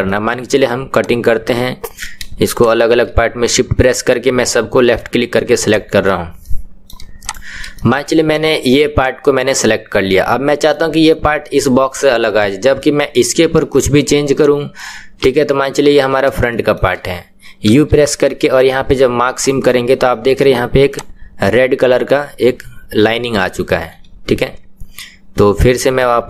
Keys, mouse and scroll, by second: 0.0 middle click, 1.0 click, 4.4-5.7 middle drag, 5.7 shift+click, 6.4 middle click, 7.3 shift+click, 7.7-15.9 middle drag, 15.9 KP_1, 16.5 shift+middle click, 16.7 shift+scroll down 1, 19.5 u, 20.9 click, 21.4-23.7 middle drag, 23.7 KP_1.